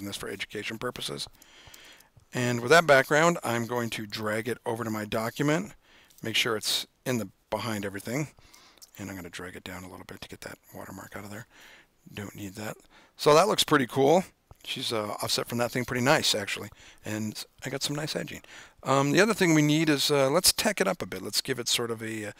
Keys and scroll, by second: 1.9 super+-, 9.1 v.